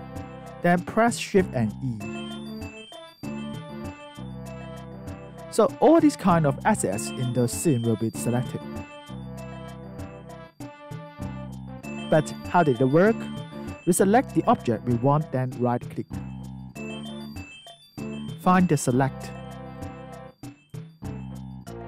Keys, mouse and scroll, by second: 0.1 alt+click, 1.0 alt+right click, 4.1 shift+e, 5.4 alt+right click, 6.5 alt+click, 7.9 alt+right click, 8.4 alt+click, 11.9 alt+right click, 13.9 click, 15.0 alt+middle click, 16.1 click, 16.9 right click.